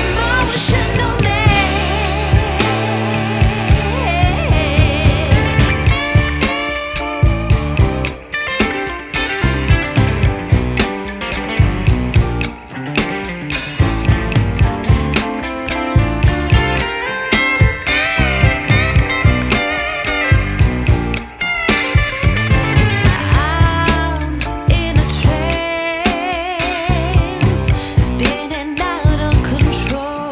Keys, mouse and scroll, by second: 3.0 click, 6.7 click, 14.5 scroll down 1, 14.6 scroll up 1, 14.8 scroll down 1, 15.4 scroll down 1, 15.6 scroll up 1, 15.6 scroll down 1, 15.8-16.4 scroll up 1, 16.5 click, 17.5 click, 20.0 click, 21.6 click, 24.6 click, 28.8 click.